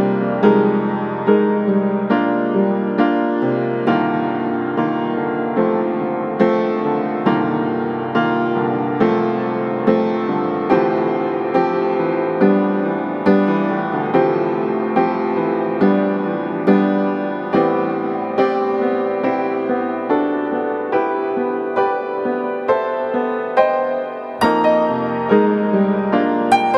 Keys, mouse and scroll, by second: 5.4-7.1 right drag, 7.1 right click, 7.5-7.8 scroll down 1, 7.8 right click, 8.0 scroll down 1, 8.1 scroll up 1, 8.3 click, 11.5 right click, 11.7 scroll up 1, 11.9 right click, 12.3 click, 13.1 click, 13.1 right click, 14.6 click, 14.8 right click, 15.1 scroll up 1, 15.2-17.1 drag, 17.1 click, 18.5 click, 18.9 middle click, 19.2 click, 19.5 right click, 19.9 scroll up 1, 20.2 right click, 20.4 scroll down 1, 20.7 right click, 21.6-22.5 scroll up 2, 21.8 right click, 22.5-22.8 scroll down 1, 23.0 right click, 23.5 scroll down 1, 23.7 scroll up 1, 23.9 right click, 24.6 scroll down 1, 24.7 scroll up 1, 24.9 click, 26.3 scroll up 1, 26.4 right click, 26.6 click.